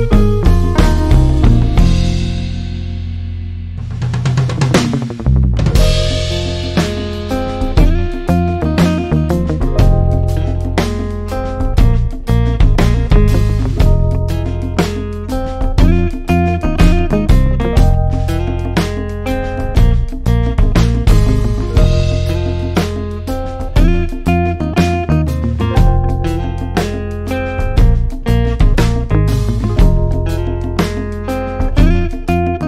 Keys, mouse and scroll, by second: 2.1-21.5 drag, 21.5 ctrl+z, 24.4-32.6 ctrl+drag.